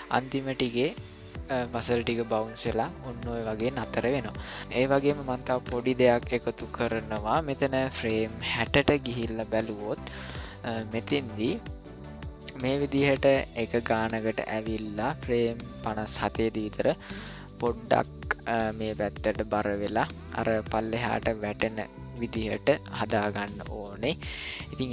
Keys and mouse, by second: 4.6-4.9 shift+middle drag, 5.3 ctrl+middle click, 5.8 middle click, 6.5 shift+middle drag, 7.6-9.4 drag, 9.8-10.3 middle drag, 10.5 shift+middle drag, 11.6-24.8 drag.